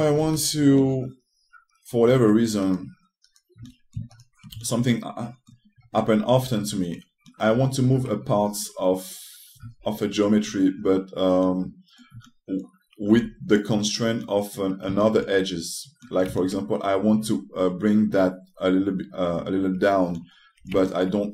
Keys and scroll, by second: 0.9 2, 2.9 1, 13.8 2.